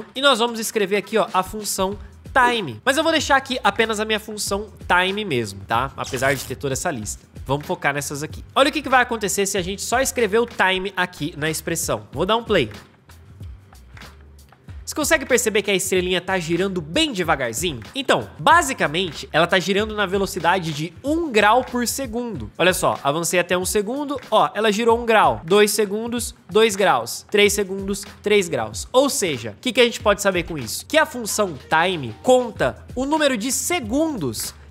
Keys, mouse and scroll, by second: 1.2 Return, 2.0-3.2 typing, 12.5 space.